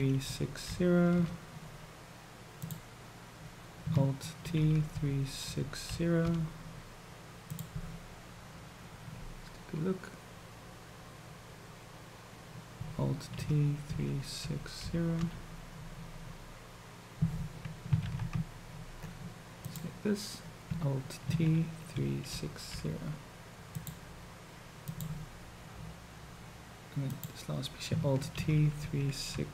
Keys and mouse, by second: 2.5 click, 4.5 ctrl+t, 13.4 ctrl+t, 18.1 ctrl+z, 19.7 click, 21.4 ctrl+t, 24.8 click, 27.0 click, 28.5 ctrl+t.